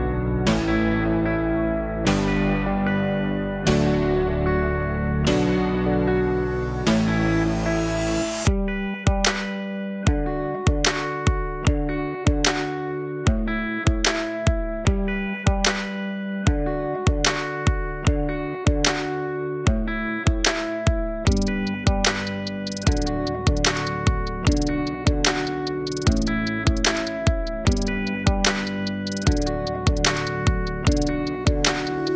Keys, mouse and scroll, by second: 3.7 click, 4.9-8.1 drag, 8.1-8.6 scroll up 1, 8.6 Tab, 10.6-12.4 right drag, 12.4-16.4 drag, 16.4-19.7 right drag, 19.7-22.8 alt+drag, 22.8-23.2 scroll up 1, 23.2 Tab, 24.1-25.1 scroll down 1, 25.1-27.6 drag, 28.2-29.3 drag.